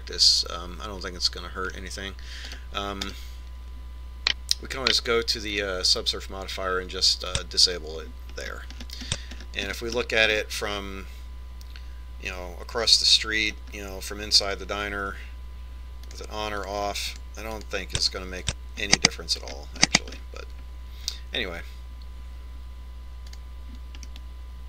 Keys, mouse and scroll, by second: 4.3 right click, 7.3 click, 9.1 click, 10.2-13.9 middle drag, 17.9-21.9 drag, 21.2-23.8 middle drag.